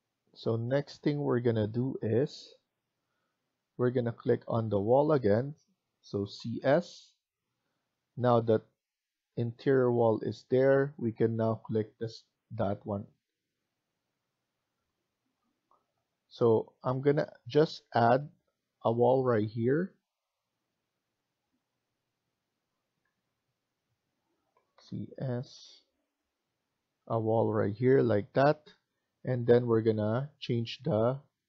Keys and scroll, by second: 6.1-6.5 typing, 22.9 Escape, 23.1 Escape, 24.2-25.2 typing.